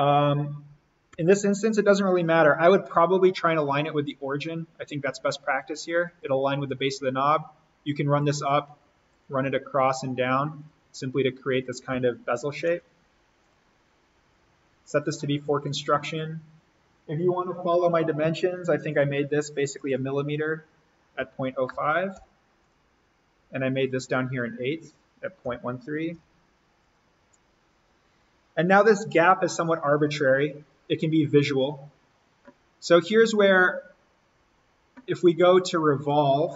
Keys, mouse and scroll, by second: 1.2 l, 3.6 click, 6.3 click, 12.7 Escape, 13.4 click, 18.2 d, 18.9 click, 21.5-22.7 typing, 22.6 click, 26.3-27.1 typing, 26.8 click, 28.8 Escape, 32.6-33.4 scroll up 1, 33.4 click, 33.8-34.1 scroll up 1, 34.1 scroll down 1, 36.0 click.